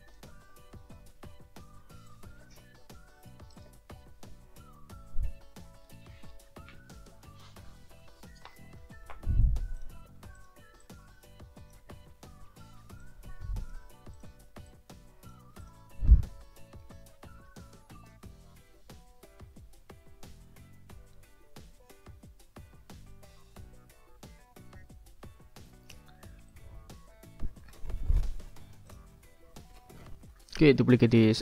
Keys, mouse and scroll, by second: 2.1-3.5 ctrl+drag, 3.7 ctrl+click, 9.8 ctrl+click, 10.2 ctrl+scroll up 1, 10.4 ctrl+click, 10.8-11.9 ctrl+drag, 13.0 click, 14.1 shift+click, 14.6 shift+click, 15.6 click, 16.0 middle click, 16.4 click, 25.2 click, 26.1 ctrl+scroll down 2, 26.5 ctrl+click, 26.7-27.3 ctrl+scroll up 1, 28.9 click, 29.9-30.5 scroll up 1, 31.2 ctrl+d.